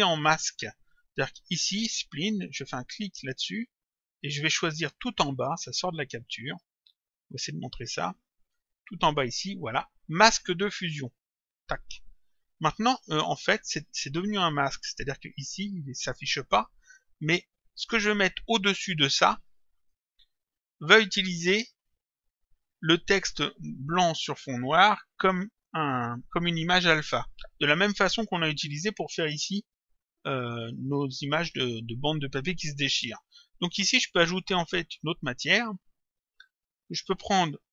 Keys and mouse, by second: 2.9 click, 5.6 click, 6.7 click, 8.5 click, 11.4 click, 13.0 click, 14.6 click, 16.9 click, 19.8 click, 35.6 click.